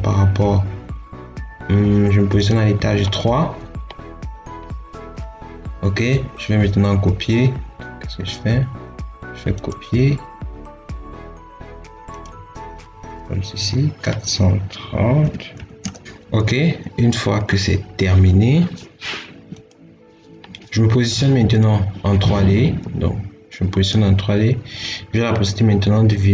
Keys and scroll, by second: 15.1 4, 15.4 3, 15.7 0.